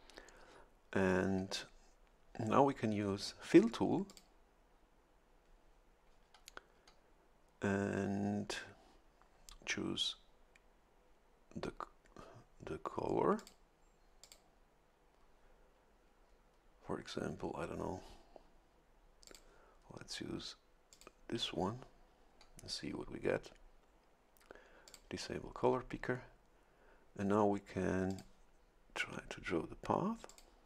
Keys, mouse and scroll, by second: 4.1 click, 13.4 click, 14.2 click, 19.2 click, 20.9 click, 24.9 click, 28.1 click, 30.3 click.